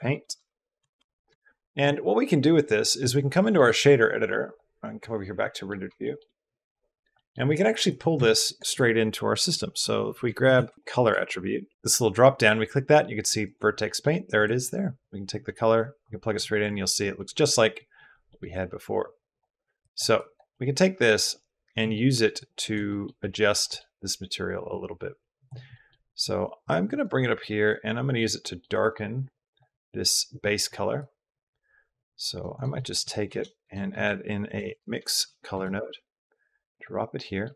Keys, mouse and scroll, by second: 3.3 click, 5.4 click, 5.9 shift+click, 7.0 click, 7.4 click, 7.7 click, 8.0 shift+a, 10.5 typing, 11.7 click, 13.6 click, 14.9 click, 17.0 click, 17.8 click, 18.1 click, 18.9-19.2 drag, 19.6 drag, 20.1 click, 20.4 middle click, 21.2 click, 21.9 middle click, 22.2 click, 22.8 click, 23.2 click, 23.5 click, 24.7-25.3 drag, 25.6 middle drag, 26.4 click, 27.0 click, 27.5 click, 28.3 middle click, 29.1 click, 30.3 click, 30.9-32.2 drag, 32.7 drag, 33.0 shift+a, 37.0 click.